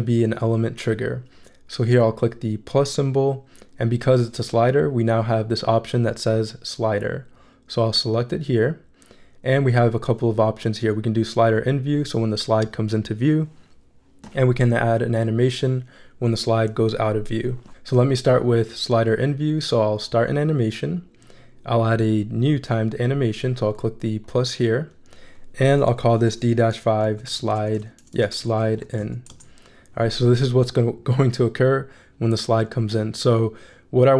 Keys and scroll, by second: 25.9-29.5 typing.